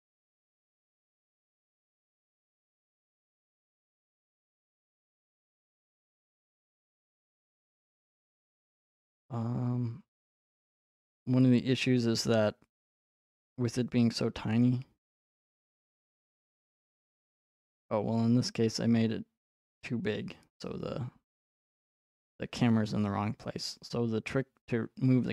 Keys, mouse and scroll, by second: 14.6 click, 16.3 click.